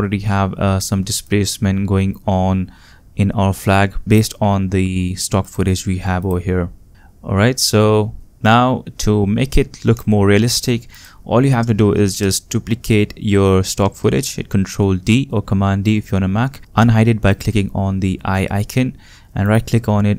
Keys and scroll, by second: 13.8 super+d.